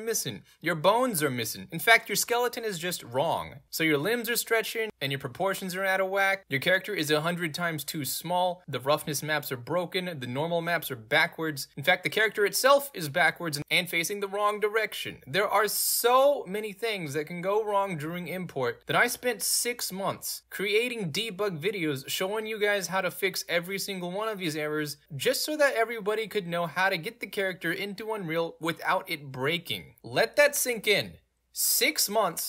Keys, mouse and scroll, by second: 18.5 middle click, 18.5 scroll down 2.